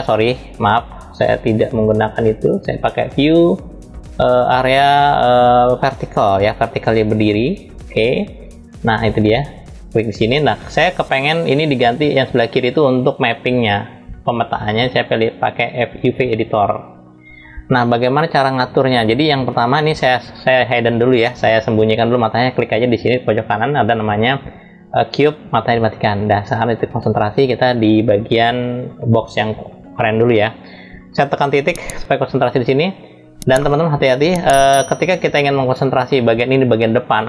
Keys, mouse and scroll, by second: 2.7-8.9 drag, 13.1-16.2 drag, 18.8-21.9 drag, 25.7 click, 29.0 click, 31.1 KP_Decimal, 33.3-35.9 middle drag, 37.1-37.2 middle drag.